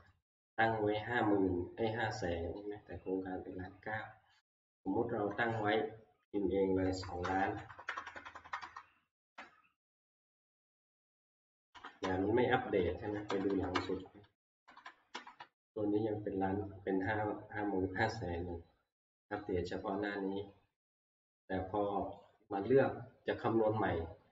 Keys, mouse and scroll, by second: 0.7 click, 1.7-6.2 drag, 5.3 0, 6.8-8.6 typing, 9.3 Return, 12.0 ctrl+Right, 12.7 ctrl+Right, 13.0 ctrl+Right, 13.3 ctrl+Right, 13.5 ctrl+Right, 13.8 ctrl+Right, 14.5 Right, 14.6 Right, 14.8 Right, 15.1 Right, 15.5 Right, 19.4-20.6 drag, 22.3 click.